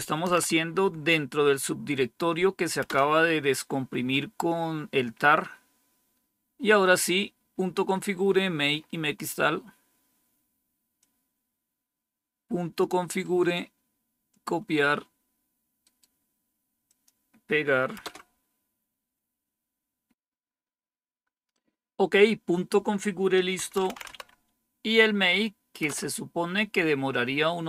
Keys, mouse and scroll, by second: 0.2 Tab, 0.4 Right, 2.8 Return, 6.0-6.9 scroll down 2, 6.9-8.7 scroll down 2, 8.7-10.0 scroll up 2, 10.0-10.9 scroll down 2, 10.9-12.7 drag, 14.2 click, 14.9 click, 15.7 right click, 16.8-17.9 drag, 17.9 Return, 23.3-24.5 typing, 25.8 Return, 26.4 typing.